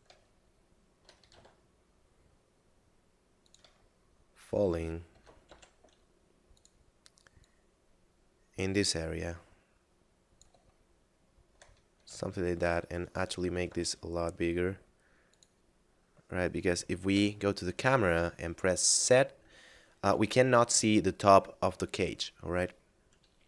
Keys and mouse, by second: 0.3 shift+middle click, 1.2 s, 1.3 x, 3.5 click, 3.9 shift+middle click, 5.0 s, 5.4 y, 6.5 click, 10.8 shift+middle click, 12.0 Tab, 13.1 right click, 13.7 g, 13.8 z, 15.3 click, 17.1 KP_0, 18.1 z.